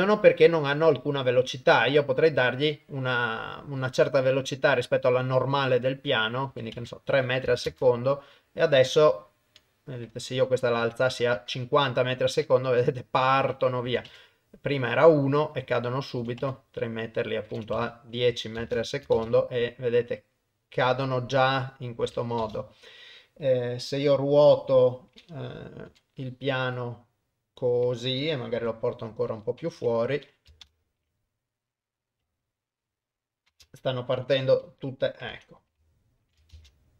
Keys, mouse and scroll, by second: 0.2 middle click, 0.9 click, 5.9 click, 7.7 shift+space, 8.6 middle click, 10.4-11.4 drag, 13.6 click, 15.7 click, 17.2 click, 18.6 shift+space, 22.4 shift+space, 24.4 r, 28.6 g, 29.8 KP_0, 30.7 shift+space, 34.3 shift+Left, 35.3 KP_0, 36.0 ctrl+middle click, 36.5 shift+space.